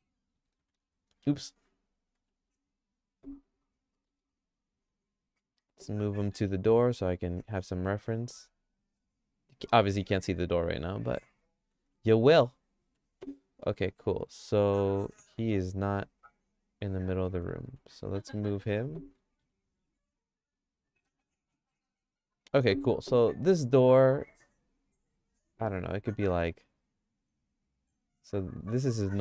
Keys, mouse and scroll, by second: 0.4 g, 1.6 click, 2.2 Tab, 2.5 click, 3.4 click, 3.9 middle click, 4.3-5.4 middle drag, 6.1 g, 10.0 middle click, 10.3-11.8 shift+middle drag, 12.9 Tab, 13.6 middle click, 15.5 middle click, 16.0-17.3 shift+middle drag, 17.7 Tab, 19.2 g, 21.0 click, 21.3 Tab, 26.0 g, 29.1 shift+middle click.